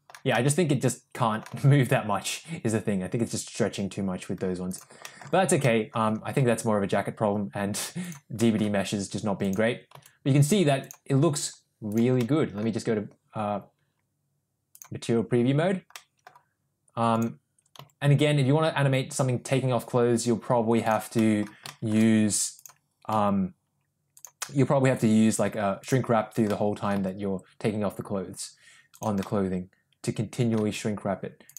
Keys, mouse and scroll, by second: 0.4-1.4 middle drag, 1.6 g, 5.6 ctrl+z, 5.6 middle click, 6.4 g, 8.5 middle click, 10.0 g, 15.9-16.2 middle drag, 17.9 g, 21.2 middle click, 21.8 shift+middle click, 23.2 g, 26.1 click, 26.6 middle click, 27.0 g, 29.2-30.7 middle drag, 30.7 g.